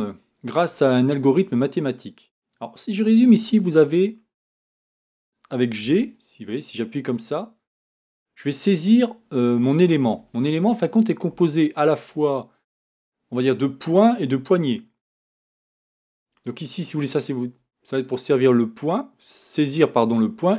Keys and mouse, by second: 3.3-5.8 right drag, 5.8 g.